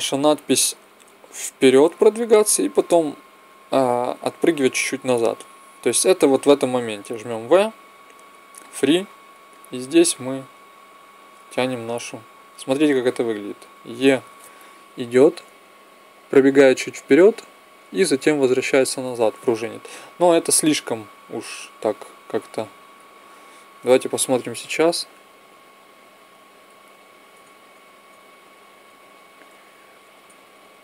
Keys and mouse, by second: 6.0-8.1 drag, 7.1 v, 9.3-12.0 drag, 14.9 Right, 16.7 Right, 17.6 Right, 20.4 click, 24.4 Left, 25.6 Left, 26.7 Left, 27.2 Right, 28.2 Right, 29.3 Left, 30.0 Right.